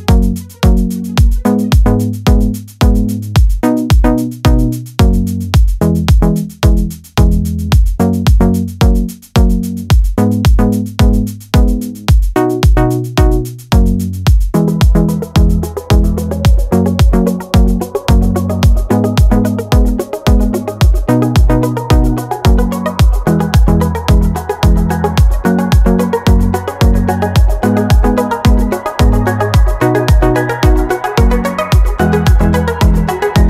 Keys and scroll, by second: 0.2 super+v, 2.6 BackSpace, 4.5 super+c, 4.7 super+v.